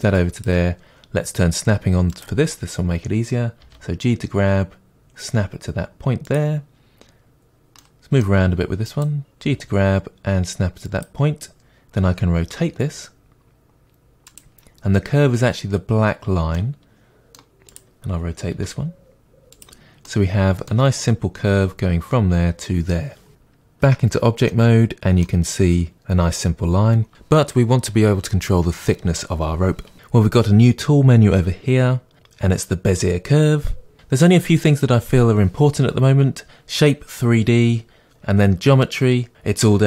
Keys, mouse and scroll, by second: 0.4 click, 2.1 click, 3.6 g, 4.1 click, 6.3 click, 7.8-8.8 middle drag, 8.8 click, 9.4 g, 11.0 click, 12.5 r, 14.4 click, 16.0-17.7 middle drag, 17.7 click, 18.5 r, 19.6 click, 20.0-24.5 middle drag, 20.2 click, 23.8 Tab, 29.9 click, 38.0-39.8 drag.